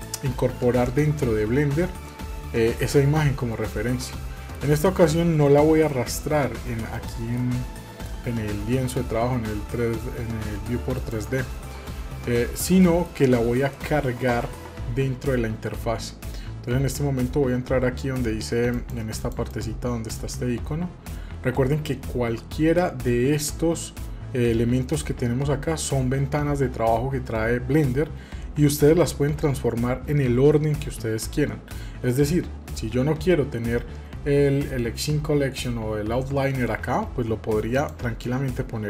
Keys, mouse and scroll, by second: 4.0-8.9 shift+middle drag, 10.9-12.7 drag, 12.7 scroll down 1, 13.7-16.8 middle drag.